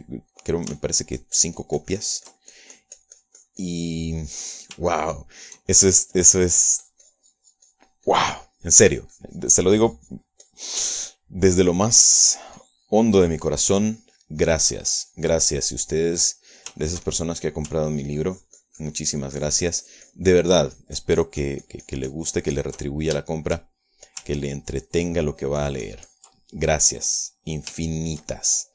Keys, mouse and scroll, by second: 0.2 middle click, 1.4 click, 1.9-5.6 ctrl+drag, 6.4 shift+middle click, 7.0 shift+middle click, 7.5-12.2 shift+drag, 12.2 middle click, 13.7-16.9 drag, 16.9 middle click, 18.0 shift+middle click, 18.9-24.4 ctrl+shift+drag, 24.4 ctrl+shift+middle click, 25.1 shift+middle click, 25.5-28.0 ctrl+shift+drag, 28.0 ctrl+middle click, 28.4-28.7 ctrl+middle drag.